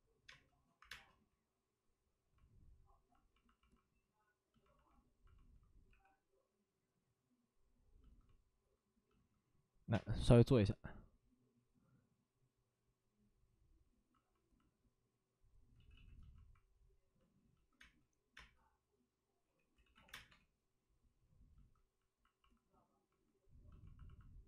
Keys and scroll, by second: 0.7 1, 0.8 space, 5.8 3, 9.8-10.6 typing, 15.7 ctrl+z, 15.8 ctrl+z, 17.7 ctrl+z, 17.7 space, 18.3 space, 19.7 ctrl+z, 20.2 space, 20.2 3.